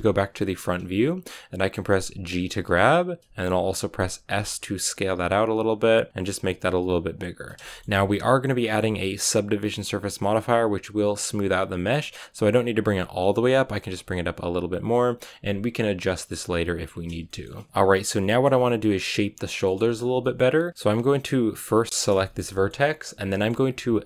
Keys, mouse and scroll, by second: 0.4-2.2 scroll up 4, 2.2 g, 4.2 s, 6.1 r, 6.4 g, 7.3 scroll down 1, 7.6 shift+middle click, 7.9-8.5 scroll up 1, 8.5 g, 12.2 g, 13.8 g, 16.8 scroll down 2, 17.2 shift+middle click, 17.4 scroll up 2, 17.7 shift+middle click, 18.4 scroll down 1, 18.6 middle click, 19.2-19.6 scroll down 2, 19.6-21.9 shift+middle drag, 21.9 right click, 22.1-24.0 shift+middle drag.